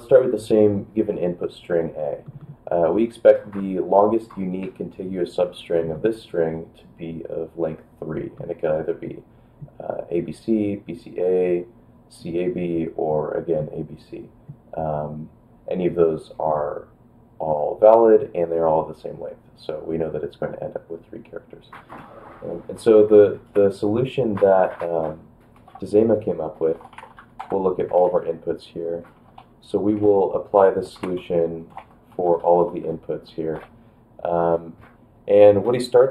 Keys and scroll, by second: 23.5 ctrl+p, 23.5 ctrl+a, 25.6 ctrl+k, 26.4-27.7 typing, 27.9 ctrl+p, 28.0 ctrl+a, 29.1-32.2 typing, 32.4 ctrl+b, 32.8 ctrl+b, 33.0 ctrl+b, 33.5 space.